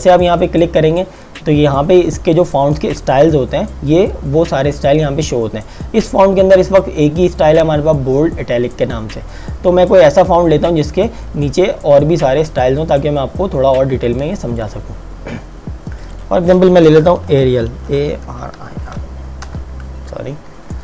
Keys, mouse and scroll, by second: 0.4 click, 14.6 click, 17.3-19.5 typing.